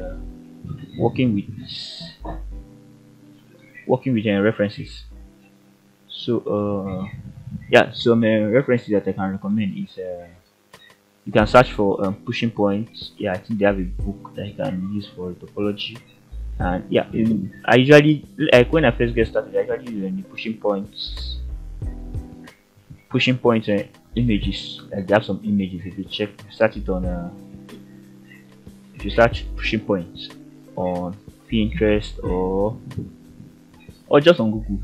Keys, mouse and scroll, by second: 0.7 f, 1.2 middle click, 2.8 shift+middle click, 4.1 ctrl+r, 7.6 click, 8.9 shift+click, 11.6 f, 12.7-13.2 shift+middle drag, 14.3 f, 17.7 middle click, 19.3 click, 20.2 shift+click, 20.9 f, 21.6 scroll down 1, 21.9-22.7 middle drag, 22.9-23.3 scroll up 3, 23.7 click, 24.5 g, 26.9 click, 27.3 middle click, 29.9-31.3 ctrl+right drag, 31.5-32.7 middle drag, 34.5 g.